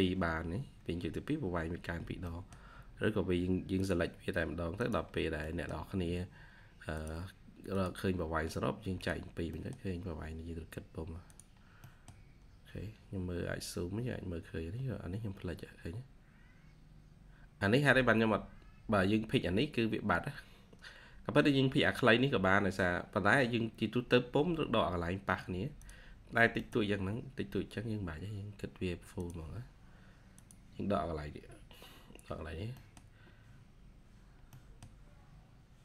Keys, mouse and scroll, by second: 2.2 middle click, 2.8-3.9 scroll up 1, 5.0 scroll down 1, 5.3 middle click, 9.4 middle click, 11.5 scroll down 1, 11.7 middle click, 12.1-12.6 scroll down 1, 12.6-13.1 scroll up 1, 17.8-18.8 scroll up 1, 26.1-26.5 scroll down 1, 26.5 middle click, 27.0-27.7 scroll up 1, 32.3-32.6 scroll down 1, 32.6 middle click, 33.5-34.4 scroll up 1, 34.4 middle click.